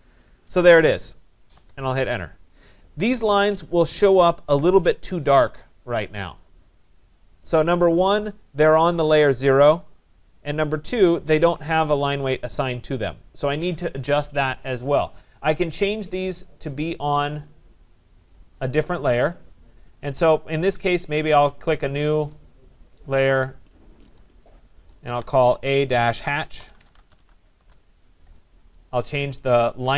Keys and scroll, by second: 1.5 Return, 27.5 Return.